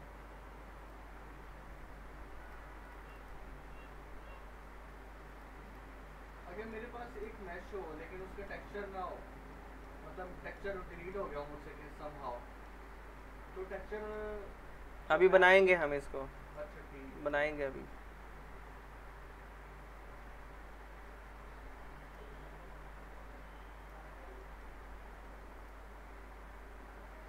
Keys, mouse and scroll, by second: 0.8 click, 5.9-6.3 scroll down 1, 6.3-6.9 middle click, 6.8 scroll up 1, 7.1 click, 7.5 alt+middle click, 7.8 scroll up 1, 8.2 alt+middle click, 8.7-9.5 scroll up 1, 9.5 alt+middle click, 9.9-10.2 scroll down 1, 10.2 middle click, 10.6 scroll down 1, 10.9 alt+middle click, 11.9-12.8 alt+middle click, 12.9 scroll up 1, 13.2-13.8 alt+middle click, 15.0 click, 15.9 z, 16.3 alt+middle click, 17.2 click, 22.0 click, 24.1 scroll down 1, 24.4 alt+middle click, 24.6 scroll up 1, 25.6 click.